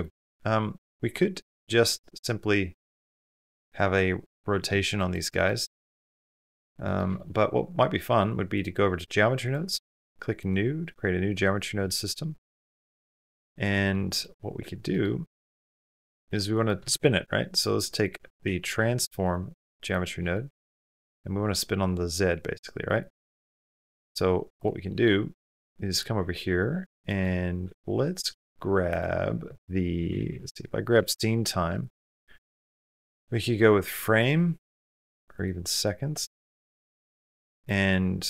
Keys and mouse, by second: 1.0 r, 5.9 shift+click, 6.7 click, 8.4-9.6 drag, 10.4-12.0 drag, 10.4 typing, 14.1-15.1 drag, 15.4 click, 16.4 click, 16.7 shift+a, 20.0 click, 21.1-22.7 drag, 23.3 click, 24.4 click, 25.4 click, 26.4 click, 27.6 shift+a, 32.2 click, 32.5 click, 33.7-35.2 drag, 35.5 click, 36.3 click, 38.1 click.